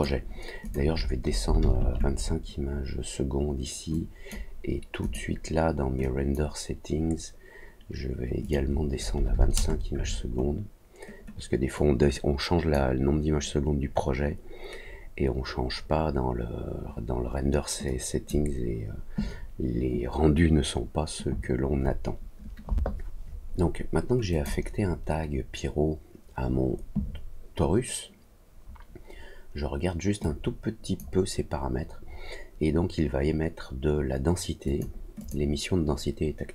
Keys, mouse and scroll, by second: 0.6 click, 3.9 click, 5.0 click, 6.0 click, 8.4 click, 11.7 click, 17.8 click, 24.3 click, 30.2 click, 34.6 click, 35.1 click.